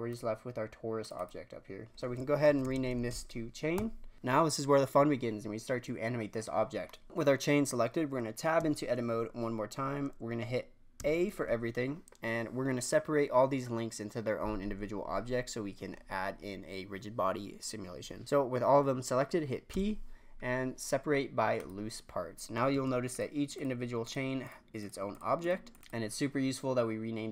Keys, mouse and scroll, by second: 0.0-1.0 drag, 1.1-4.1 drag, 6.4-7.0 scroll down 1, 7.0 middle drag, 7.0-8.5 scroll down 1, 8.5 Tab, 10.9 a, 19.7 p, 22.7 Tab, 23.0 click, 23.5 click, 24.0-25.1 drag, 25.4-26.7 drag.